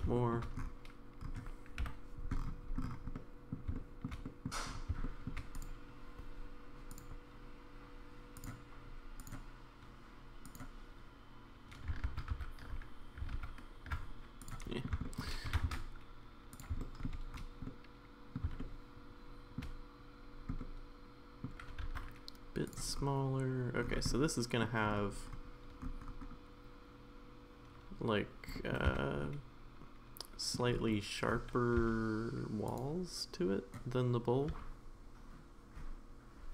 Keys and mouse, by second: 0.0 s, 0.1 shift+middle drag, 1.8 KP_Decimal, 3.1-3.5 middle drag, 3.7-4.1 middle drag, 4.2 middle drag, 5.0 shift+middle drag, 5.6 click, 12.3 ctrl+z, 13.4 ctrl+z, 14.7 middle drag, 15.0 middle drag, 15.5 g, 16.8 middle drag, 17.6-18.4 middle drag, 18.6-19.6 shift+middle drag, 20.6-21.5 middle drag, 24.1-24.6 middle drag, 24.1 s, 28.5 middle drag, 28.9 Tab, 29.2-30.6 middle drag, 31.8 e, 34.5 s.